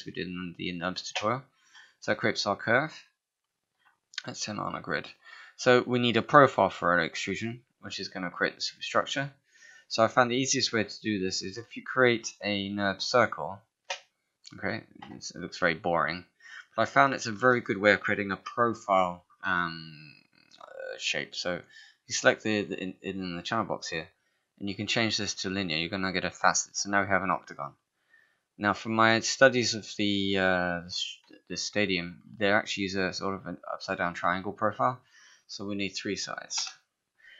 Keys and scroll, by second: 9.7 space, 15.4 f, 17.4 ctrl+a, 36.4 3, 36.6 Return.